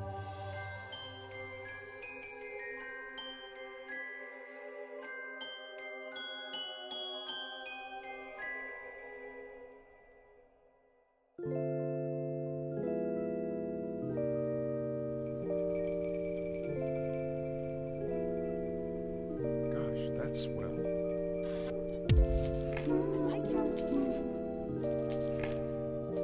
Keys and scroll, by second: 1.4 space, 8.2 0, 9.1 5, 9.3 Return, 11.7 1, 12.0 Return, 13.1 2, 13.4 Return, 14.3 3, 14.5 Return, 16.6 2, 16.8 Return, 24.5 ctrl+z.